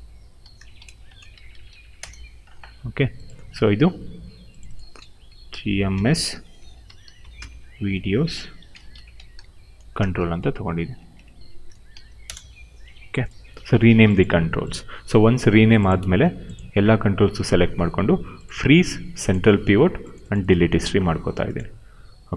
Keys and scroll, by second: 0.0-1.8 typing, 1.9 Return, 4.9-9.7 typing, 10.1 Left, 11.8 shift+-, 12.1 Return.